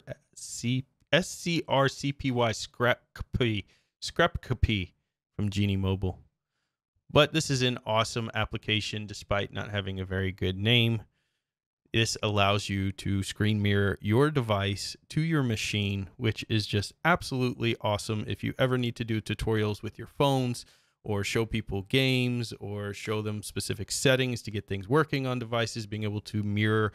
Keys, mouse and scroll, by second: 1.7-2.0 scroll down 2, 3.4-4.5 scroll down 6, 5.5-5.9 scroll down 2, 6.2-6.5 scroll down 2, 6.7-7.0 scroll down 2, 7.2-9.2 scroll down 10, 11.4-11.7 scroll down 2, 12.0 scroll down 2, 15.8-16.1 scroll down 2, 16.3-16.6 scroll down 1, 16.8 scroll down 1, 17.4-17.7 scroll down 1, 19.3-19.7 scroll down 1, 20.1 scroll down 1, 20.6-20.9 scroll down 1, 21.9 scroll down 1, 22.4-22.8 scroll down 1, 24.8-26.9 scroll down 16.